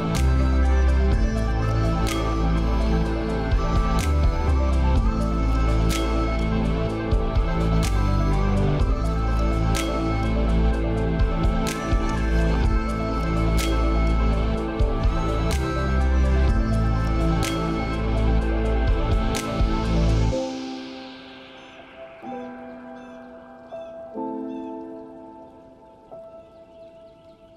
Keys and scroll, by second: 10.7 ctrl+space.